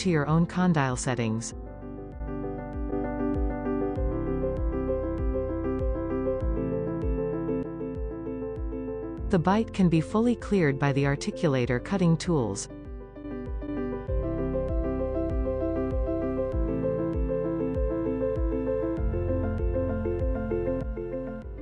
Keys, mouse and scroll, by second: 0.0-1.3 drag, 3.6-5.3 middle drag, 5.9 click, 8.7 scroll up 2, 9.0-9.8 shift+middle drag, 9.8-11.2 drag, 12.8 alt+b, 13.4-14.4 scroll down 5, 15.0 scroll down 3, 15.8 shift+middle click, 16.0 scroll up 3, 16.5 click, 18.0 shift+middle click, 18.2 click, 18.3-19.0 middle drag, 19.0 click, 19.1-20.5 shift+middle drag, 20.5-21.6 drag.